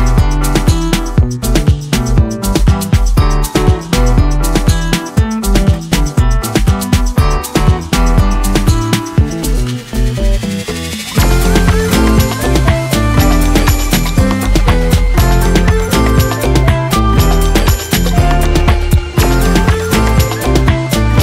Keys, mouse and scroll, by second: 1.2-1.9 ctrl+click, 2.5 ctrl+m, 4.6-8.0 drag, 9.7 Return, 10.9 ctrl+l, 12.6 click, 16.2-16.6 click, 16.9 Return, 18.3 o, 19.5 scroll up 1, 20.0-21.2 typing.